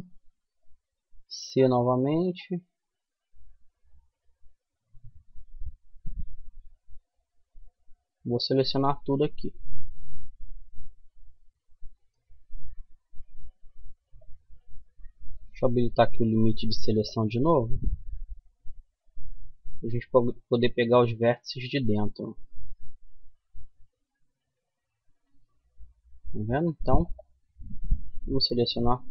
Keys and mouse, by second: 9.4-11.1 right drag, 11.1 middle click, 13.4-17.9 middle drag, 15.8 c.